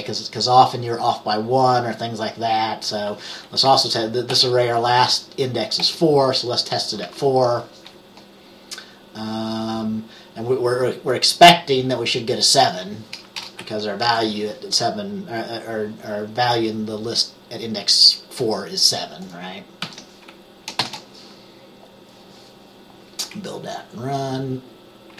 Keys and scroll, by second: 4.4 typing, 5.9 typing, 13.5 BackSpace, 14.2 7, 19.9 ctrl+s, 20.9 ctrl+b.